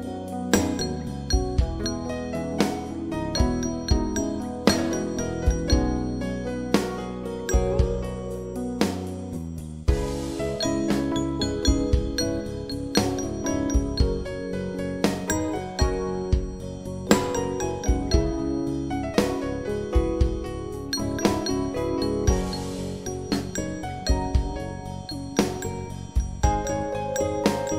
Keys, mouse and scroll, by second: 3.1 click, 4.8 click, 7.3 click, 11.6 right click, 14.4 click, 18.2 click, 20.7-21.7 typing, 23.2-26.1 typing, 27.2-27.7 typing.